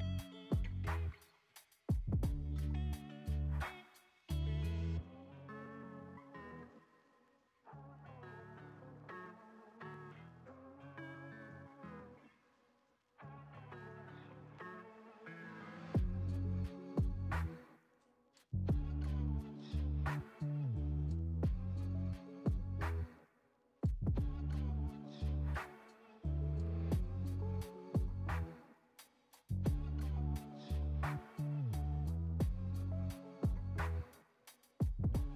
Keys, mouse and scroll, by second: 0.3 space, 1.4-7.6 drag, 7.6 space, 10.0 space, 10.7-12.6 drag, 12.6 space, 13.6 space, 14.8-17.3 drag, 17.3 space, 18.3 space, 19.3-21.8 drag, 21.8 space, 24.2 space, 26.2-29.4 drag, 29.4 space, 32.5 space, 32.9-35.3 middle drag.